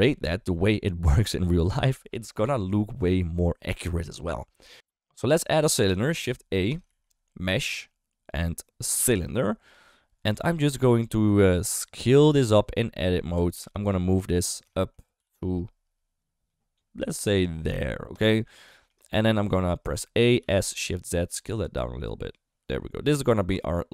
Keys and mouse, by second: 4.7 typing, 6.9 shift+a, 13.0 alt+z, 13.4 Tab, 13.6 3, 14.7 shift+middle click, 16.0 g, 18.7 shift+middle click, 19.4 a, 19.9 shift+middle click, 20.4 s.